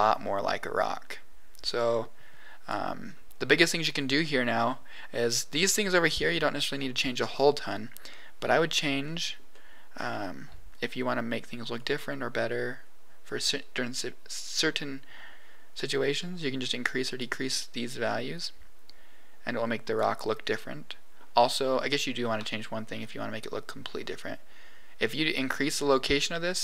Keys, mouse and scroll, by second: 0.1-0.9 scroll up 1, 1.8 click, 3.0 scroll down 2, 3.4 middle click, 8.0-9.0 scroll up 4, 9.0 middle click, 9.4 middle click, 11.7-13.8 drag, 14.1-17.3 drag, 18.3-19.9 drag, 20.7 middle click, 22.9-25.9 drag, 26.5 middle click.